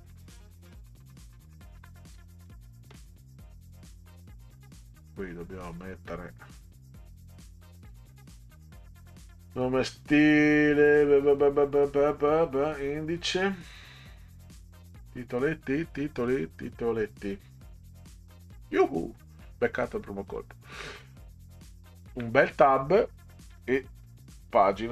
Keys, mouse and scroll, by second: 0.0-2.9 typing, 4.5-5.7 drag, 7.0 click, 8.5 click, 17.8 click, 20.3 click, 22.1 Tab, 23.5 1.